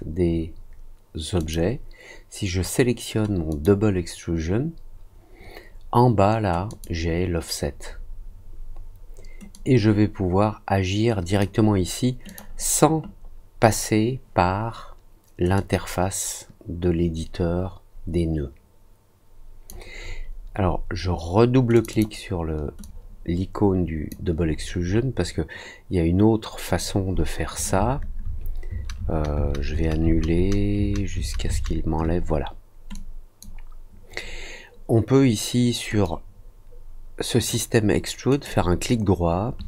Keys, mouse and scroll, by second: 1.3 click, 3.4 click, 6.6 click, 9.5-11.3 drag, 12.2 click, 15.5-19.6 drag, 21.7 click, 21.8 click, 22.8-24.0 drag, 24.6 scroll down 1, 24.7 scroll up 1, 25.0 scroll down 1, 32.9-33.3 drag, 36.0-37.4 drag, 38.2 right click.